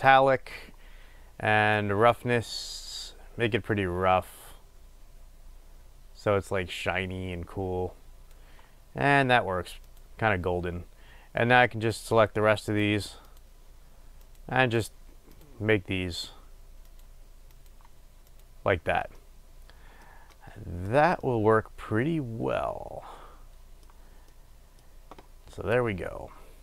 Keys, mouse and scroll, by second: 12.3-13.6 drag, 14.5-15.7 drag, 17.9-19.2 drag, 19.4-26.0 middle drag, 26.0-26.6 drag.